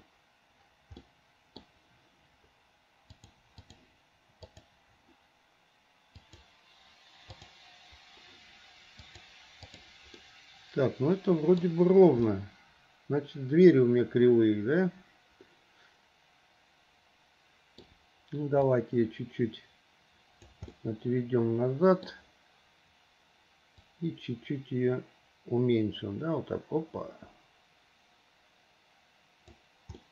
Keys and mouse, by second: 1.2 click, 1.4 middle click, 3.3-4.8 drag, 6.4-7.6 drag, 9.4 click, 10.3-11.8 middle drag, 12.5-18.0 middle drag, 18.9-20.6 drag, 20.9-22.3 middle drag, 24.0-29.7 drag.